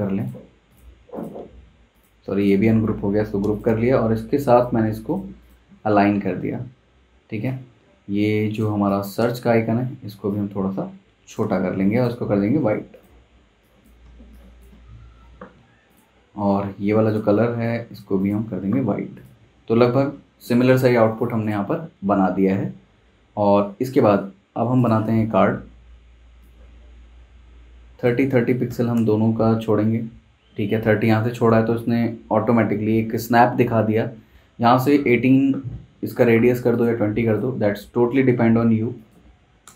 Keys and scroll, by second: 3.0 super+g, 8.7 z, 9.2 v, 14.0 space, 22.0 super+s, 28.7 v, 39.2-39.7 typing.